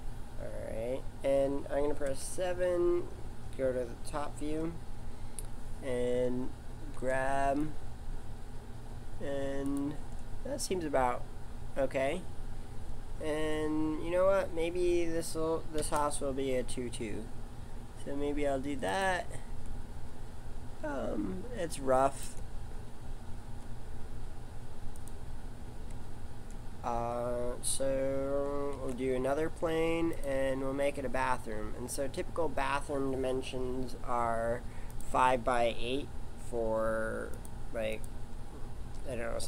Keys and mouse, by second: 0.7-2.1 middle drag, 2.1 KP_7, 6.9 g, 12.8-15.8 middle drag, 15.8 shift+d, 23.3 g, 28.7 shift+a, 34.9 click, 37.9 click.